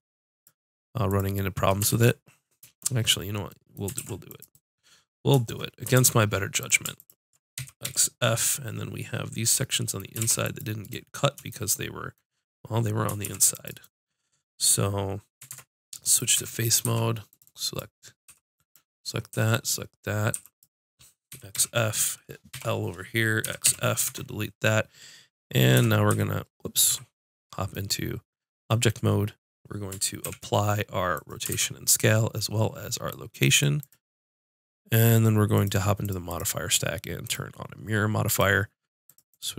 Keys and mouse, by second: 1.1 click, 1.9 ctrl+z, 4.0 ctrl+r, 6.0 ctrl+Tab, 7.0 click, 7.6 x, 10.2 ctrl+r, 13.3 ctrl+r, 13.9-15.5 drag, 15.5 ctrl+Tab, 16.4 z, 16.9 b, 17.5-19.0 drag, 18.3 b, 19.4 b, 20.4 b, 21.6 x, 22.5 l, 23.5 x, 24.1 Tab, 25.9 shift+z, 26.9 z, 30.2 ctrl+a, 31.5 ctrl+a, 35.6-39.5 drag.